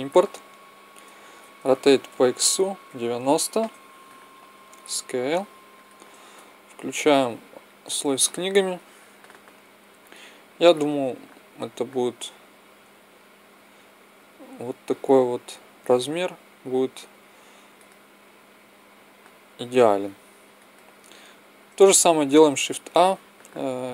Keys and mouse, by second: 0.0-1.1 drag, 1.6 r, 4.6 s, 7.5-10.5 drag, 12.8 s, 15.9 click, 22.3 shift+a.